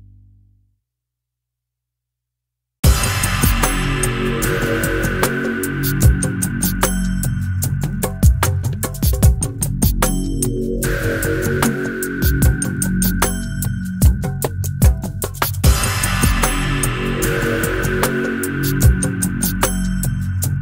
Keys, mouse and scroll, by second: 0.5-2.8 drag, 3.3 click, 4.4 middle click, 4.7 click, 6.0 click, 6.3 right click, 7.6 click, 8.4-10.0 drag, 10.4 click, 11.1-14.1 drag, 14.5-17.8 drag, 17.9 click, 18.4 middle click, 20.2 click.